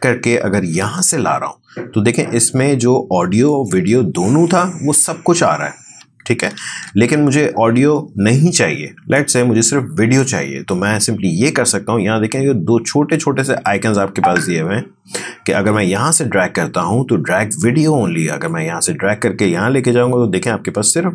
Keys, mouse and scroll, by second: 0.9-3.4 drag, 3.9 space, 5.8 space, 20.0-21.1 drag.